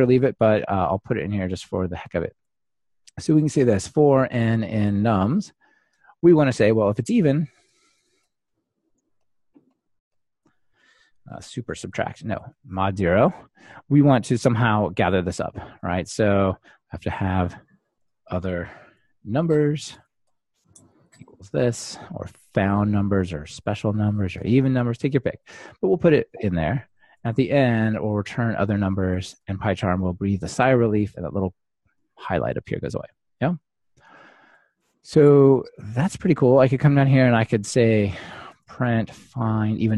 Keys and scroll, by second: 23.0 super+c, 23.8 Tab, 24.5 super+v, 29.5 Return, 39.8 Return.